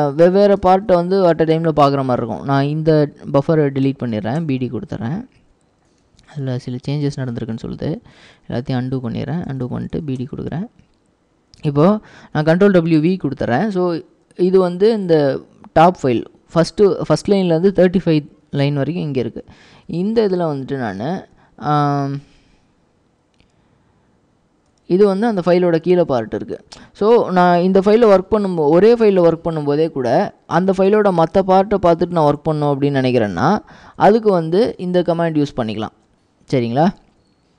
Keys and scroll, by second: 0.6-1.8 typing, 3.9 typing, 4.4 Return, 6.1 ctrl+w, 6.3 typing, 7.7-10.5 typing, 12.6 ctrl+w, 13.1 ctrl+w, 19.7 ctrl+w, 20.0-25.2 typing, 26.6-28.0 typing, 27.6 ctrl+w, 30.9-33.9 typing, 37.2-37.5 typing.